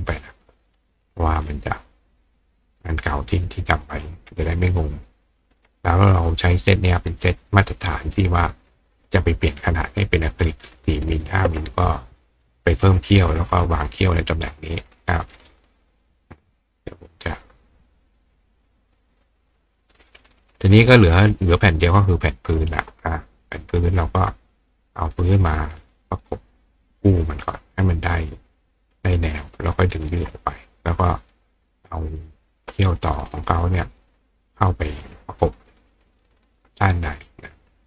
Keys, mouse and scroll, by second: 2.2 click, 2.8-3.9 drag, 4.5-5.3 drag, 6.4-8.5 drag, 9.0-10.8 drag, 11.2 click, 12.3 click, 15.3 right click, 16.7 click, 19.8 click, 20.5 click, 21.8 click, 23.4 ctrl+click, 24.6-25.8 drag, 26.6-28.9 drag, 29.6 ctrl+click, 30.3 click, 31.2 click, 31.9 click, 33.4 click, 34.0-34.6 drag, 37.6-37.8 ctrl+drag.